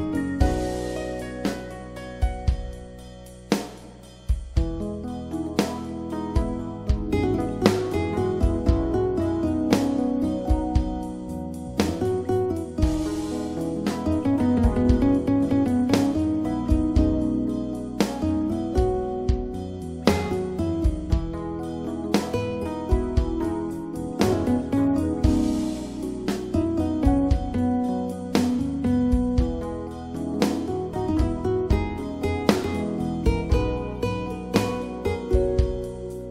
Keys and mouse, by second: 0.6 a, 1.4 a, 3.1 s, 5.8-7.8 drag, 15.2 click, 24.8 Delete, 27.5 click, 29.1 click, 32.0-36.3 middle drag.